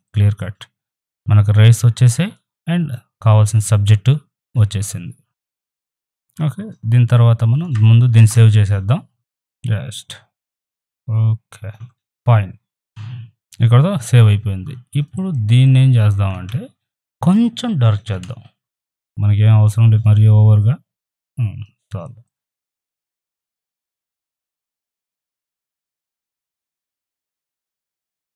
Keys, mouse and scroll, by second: 5.5 click, 7.6 click, 8.1 ctrl+shift+s, 9.1 click, 14.9 right click, 15.2 click, 16.3 ctrl+z, 18.1 ctrl+m, 19.7-22.3 drag, 22.7 right click, 23.2 click, 24.2 right click, 24.2-25.8 drag, 25.8 ctrl+t, 26.1-28.3 alt+drag.